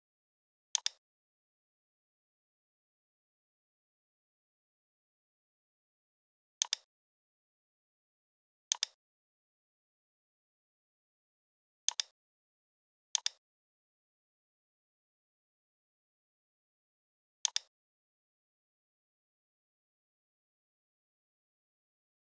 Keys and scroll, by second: 4.0 e, 11.1 a, 15.6 l, 21.0 i.